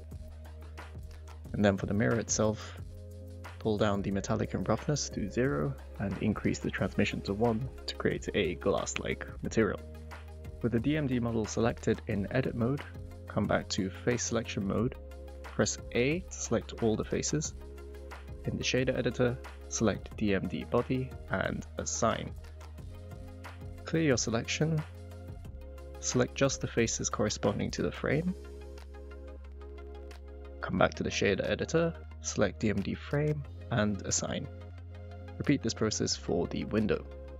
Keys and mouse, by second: 0.4 click, 2.6 click, 4.9 click, 5.9 drag, 10.5 middle click, 11.3 middle click, 11.7 Tab, 12.4 middle click, 13.7 click, 16.3 a, 20.6 click, 22.4 click, 25.5 click, 25.8 shift+click, 26.9 middle drag, 27.4 shift+middle click, 28.8 shift+click, 29.6 shift+click, 30.3 middle click, 30.8 shift+middle click, 32.3 click, 33.1 click, 34.3-34.8 middle drag, 35.5-36.2 middle drag.